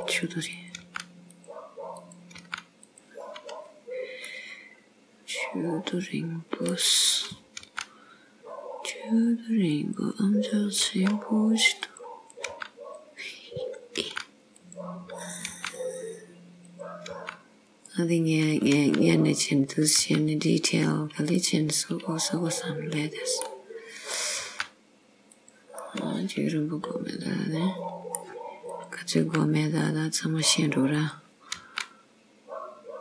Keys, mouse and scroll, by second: 0.6 click, 0.9 g, 2.1 click, 2.5 g, 3.5 scroll down 1, 4.4 middle click, 4.6 click, 7.2 click, 7.7 g, 10.6 click, 10.9 g, 12.3 click, 12.6 g, 13.7 click, 14.1 g, 15.2 click, 15.5 g, 16.7 click, 17.3 g, 18.6 click, 18.8 g, 19.7 click, 20.2 g, 21.0-21.4 scroll down 2, 21.4 middle click, 24.1 click, 24.5 g, 25.8-26.4 scroll down 1, 26.4 middle click, 28.7 click, 29.3 g, 31.0 click, 31.7 g.